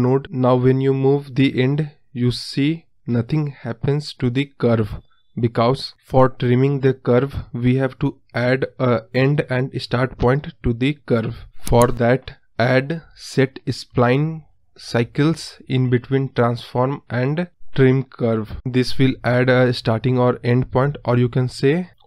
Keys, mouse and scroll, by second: 6.0-12.2 drag, 12.2 ctrl+z, 16.1-17.2 scroll up 1, 17.2-17.6 middle drag, 17.6-18.0 scroll up 2, 18.0-19.1 scroll down 2, 19.1-20.1 scroll down 1, 20.1-21.5 drag.